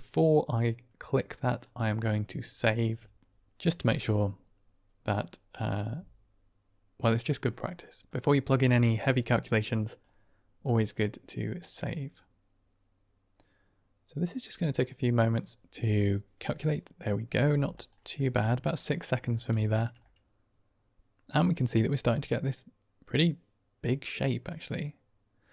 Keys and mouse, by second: 8.0-9.9 drag, 17.9 middle click, 19.5 shift+drag, 19.9-21.5 middle drag, 22.4-25.5 middle drag.